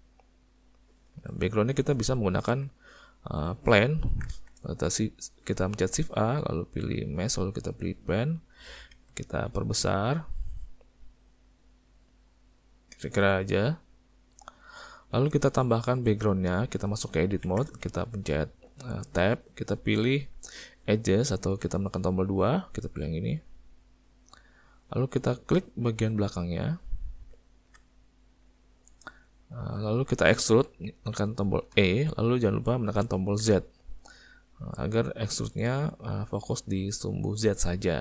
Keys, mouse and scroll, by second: 0.4 click, 1.9 middle click, 2.4 Tab, 4.3 shift+a, 9.0 s, 15.0 shift+middle click, 15.4 middle click, 15.9 shift+middle click, 17.5 Tab, 23.6 click, 26.6 click, 27.2 `, 28.3 middle click, 29.2 middle click, 31.7 e.